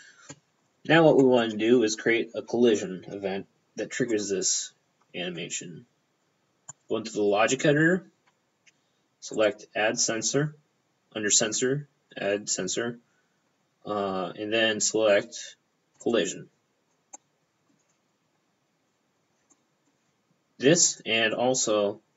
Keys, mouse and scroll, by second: 1.3 middle click, 1.4 p, 4.2 click, 4.3 p, 6.8 click, 9.4 click, 13.5-14.7 scroll down 5, 14.7 scroll down 1, 16.1 click, 16.2 p, 17.2 middle click, 19.6 middle click, 19.9 p, 20.9 click.